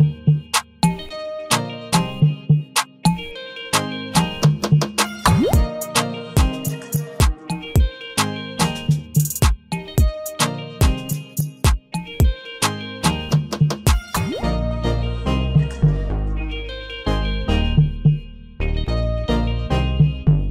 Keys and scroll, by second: 10.0 ctrl+d, 15.3 ctrl+t.